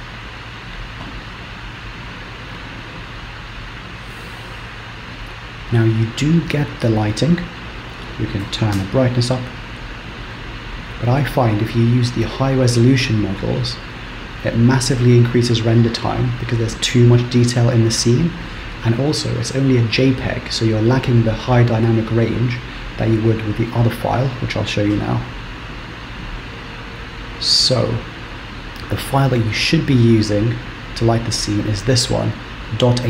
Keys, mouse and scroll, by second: 8.2 click, 25.6 z, 28.4 click.